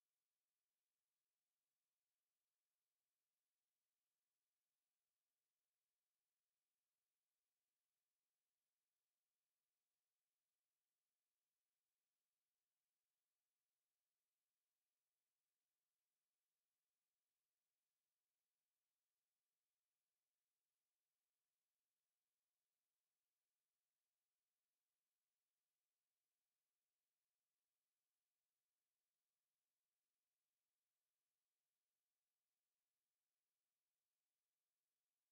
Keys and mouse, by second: 0.2 alt+right click, 0.8 alt+click, 1.3 alt+click, 1.9 alt+click, 3.2 right click, 4.6 ctrl+z, 5.1 right click, 5.8 click, 6.2 w, 6.6 click, 7.3 ctrl+z, 7.6 click, 7.9 right click, 8.7 click, 9.5 right click, 10.4 click, 15.4 alt+click, 16.9 click, 18.0 alt+click, 18.8 click, 20.1 alt+click, 20.5 alt+right click, 20.8 alt+click, 21.2 right click, 22.8 click, 24.0 shift+right click, 25.4 click, 28.6 alt+middle click, 29.0 alt+click, 29.6 click, 30.5 w, 31.4 click, 32.8 alt+click, 33.6 click, 33.9 alt+click, 34.4 shift+right click.